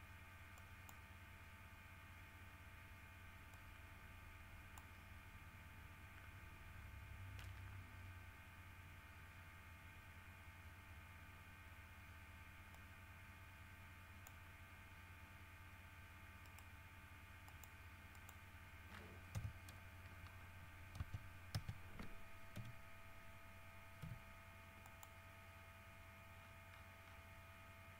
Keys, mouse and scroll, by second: 0.7 click, 3.7-5.1 drag, 12.9-14.6 drag, 16.6 right click, 17.6 click, 18.3 click, 19.0 scroll down 2, 19.5 KP_7, 20.5 scroll down 2, 21.1 Tab, 22.7 l, 24.2 x, 25.0 middle click, 26.5-27.9 scroll down 8.